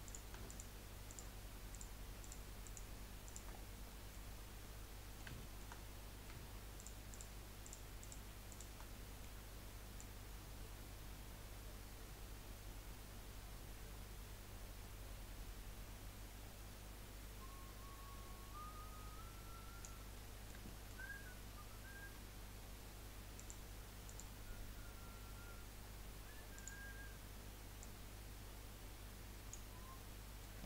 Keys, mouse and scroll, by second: 0.0 click, 0.5 shift+click, 1.7 shift+click, 2.2 shift+click, 2.6 shift+click, 3.2 shift+click, 3.5-3.9 scroll down 6, 3.9 middle click, 4.6-5.8 middle drag, 5.8-6.8 scroll up 3, 6.8 shift+click, 7.1 shift+click, 7.6 shift+click, 8.0 shift+click, 8.5 shift+click, 8.9-10.0 middle drag, 10.0 click, 20.1-23.4 middle drag, 23.4 click, 24.0-27.2 drag, 27.8 click, 29.8-30.1 scroll down 4, 30.1-30.6 middle drag.